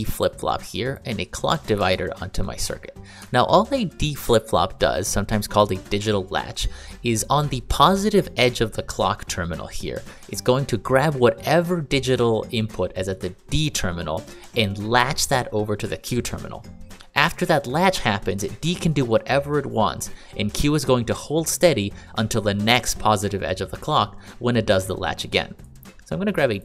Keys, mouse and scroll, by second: 1.7 click, 3.2 ctrl+click, 26.5 click.